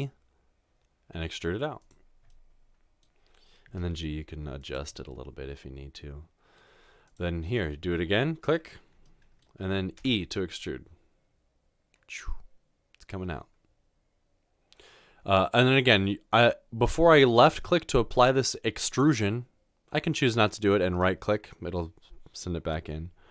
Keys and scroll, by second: 3.8 g, 10.1 e.